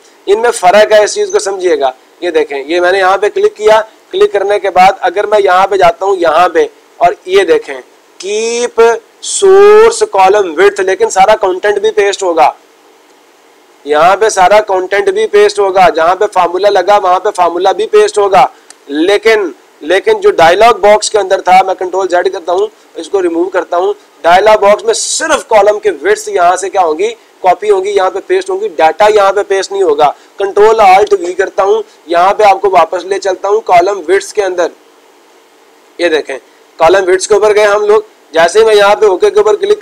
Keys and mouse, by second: 1.2 click, 2.1 click, 5.8 click, 14.3 click, 16.2 click, 16.5 click, 17.2 click, 17.4 click, 23.3 click, 24.3 click, 24.6-25.6 drag, 36.1-37.1 drag, 38.9-39.8 drag.